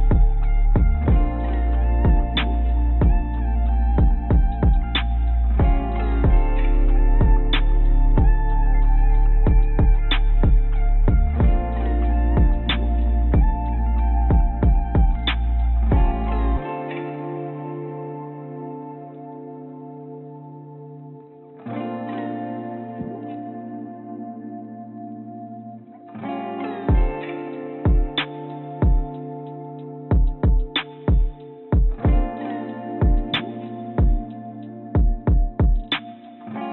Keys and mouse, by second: 3.8 i, 8.1 Tab, 10.3 ctrl+z, 10.6 ctrl+a, 15.9 Tab, 16.8 Tab, 17.4 Tab, 20.3 shift+click, 21.1 click, 22.2 shift+click, 22.8 click, 24.4 i, 26.1 click, 26.3 click, 29.4 click, 30.2 click, 31.0 click, 33.9 click, 34.4 middle click, 35.2 i.